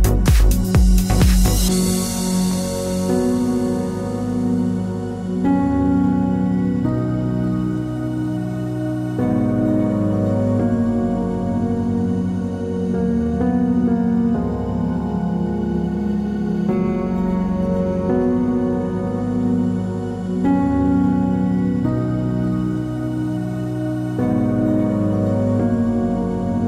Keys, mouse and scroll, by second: 0.5 Tab, 1.0 KP_7, 1.4 a, 4.6 shift+click, 4.8 Tab, 7.7 shift+click, 7.7 shift+right click, 8.2 scroll up 1, 8.9 g, 10.3-20.4 middle drag, 11.0 scroll down 1, 13.2 KP_3, 16.2 shift+click, 18.2 s, 20.4 KP_7, 20.8 scroll down 1, 21.2 s.